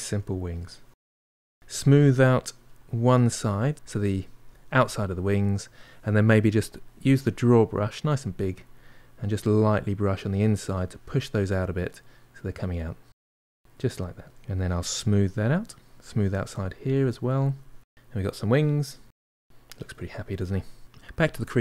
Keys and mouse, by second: 0.1 shift+click, 0.5 middle click, 0.9-2.0 shift+drag, 2.0 middle click, 2.6-4.8 shift+drag, 4.8-6.6 middle drag, 6.6-7.8 drag, 7.8 f, 8.4 middle click, 9.0-11.0 drag, 11.0 middle click, 12.0 click, 12.9 middle click, 13.5-14.5 drag, 14.5 middle click, 14.8 shift+click, 15.3 middle click, 15.6-16.6 shift+drag, 16.6 middle click, 16.9 shift+click, 17.4-19.4 middle drag, 19.7-21.3 shift+drag.